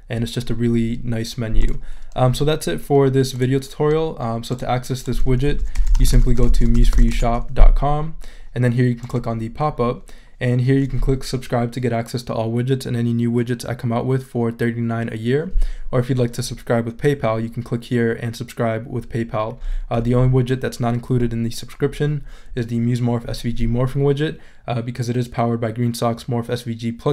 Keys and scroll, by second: 5.4-7.5 typing.